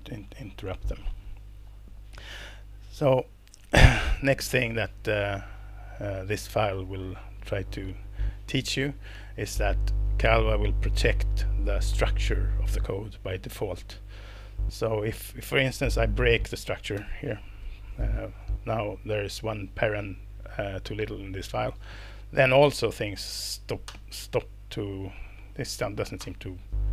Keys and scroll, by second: 17.0 alt+BackSpace, 23.8 alt+Return, 26.2 alt+Return.